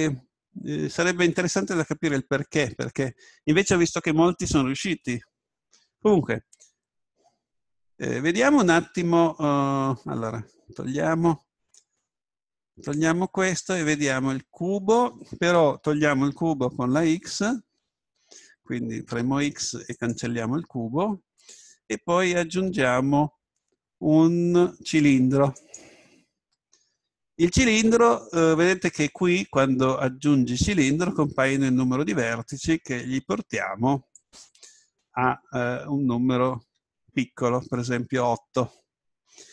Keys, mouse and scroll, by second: 11.8-15.0 drag, 15.0-19.1 middle drag, 19.1 x, 22.5 shift+a, 34.4-36.2 drag.